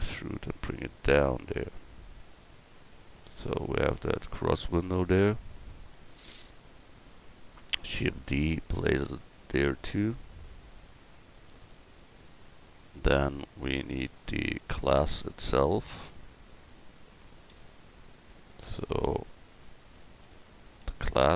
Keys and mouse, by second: 3.2 Tab, 6.0 KP_1, 7.8 shift+d, 14.7 right click, 15.1 Tab, 17.5 l, 19.3 a, 20.2 l.